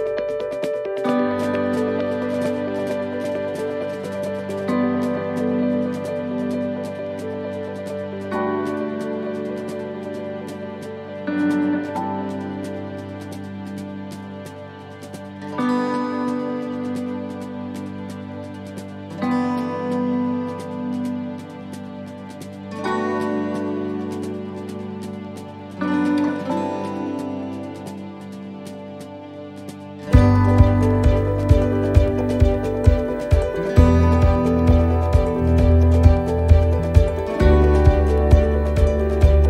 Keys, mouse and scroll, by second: 1.2 middle click, 2.0 shift+middle click, 2.5 middle click, 3.8 shift+middle click, 3.8 right click, 4.3 shift+right click, 4.7 middle click, 5.7 shift+right click, 6.0 shift+right click, 6.8 shift+right click, 7.2 shift+right click, 8.1 e, 8.8 s, 12.4 middle click, 14.0 ctrl+r, 15.8 middle click, 17.1 s, 18.7 middle click, 20.6 middle click, 20.9 ctrl+t, 22.7 ctrl+r, 25.5 s, 27.3 middle click, 28.8 scroll down 1, 29.1 middle click, 30.3 middle click, 30.5 scroll up 1, 30.8 middle click, 31.3 shift+middle click, 31.4 shift+middle click, 32.0 ctrl+r, 34.8 ctrl+r, 36.3 middle click, 38.8 click.